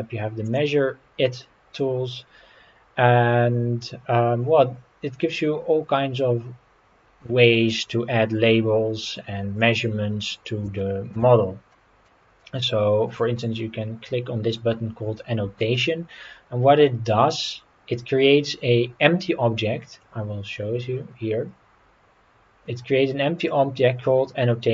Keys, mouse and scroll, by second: 0.4 click, 9.6-10.3 middle drag, 10.8-11.1 shift+middle drag, 11.7-12.1 middle drag, 12.4-13.1 middle drag, 19.9 click, 23.4 click.